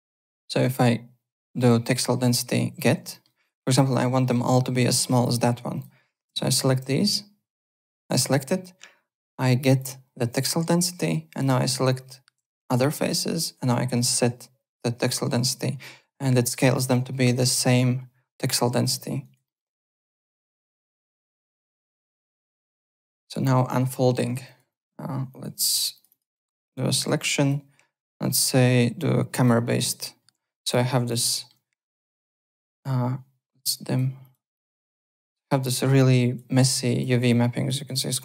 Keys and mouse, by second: 0.1 alt+middle click, 3.1 alt+middle click, 3.2 alt+right click, 3.5-4.4 typing, 3.6 click, 5.7 click, 6.5 shift+click, 7.9 click, 9.6 click, 11.3 click, 11.9 shift+click, 12.7 alt+middle click, 14.0 click, 16.1 3, 17.1 alt+right click, 17.3 alt+click, 18.8 alt+click, 19.2 alt+right click, 19.4 alt+middle click, 20.3 alt+right click, 21.3 alt+right click, 21.5 alt+click, 21.9 alt+right click, 22.9 alt+Tab, 23.4 w, 23.7 3, 23.9 click, 24.4 alt+right click, 24.7 alt+click, 25.3 click, 25.9 shift+click, 27.1 alt+click, 28.2 click, 29.3 click, 29.9 z, 30.3 w, 30.7 click, 31.2 alt+middle click, 32.1 click, 32.6 click, 33.7 click, 35.2 alt+middle click, 35.4 alt+right click, 35.9 click, 36.6 alt+click, 37.3 alt+click, 37.7 alt+right click, 37.9 alt+click.